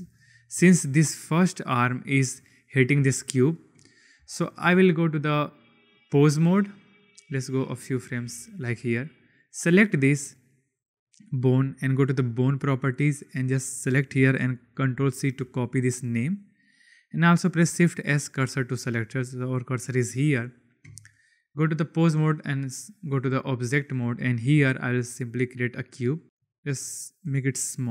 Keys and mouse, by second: 0.1 shift+drag, 1.0 click, 4.2 shift+drag, 5.1-6.0 drag, 6.9 click, 9.1 click, 12.2 click, 13.2-16.0 drag, 17.6 shift+s, 21.4-21.9 drag, 24.4 shift+a, 26.2-27.3 drag, 26.2 s, 27.7 KP_7.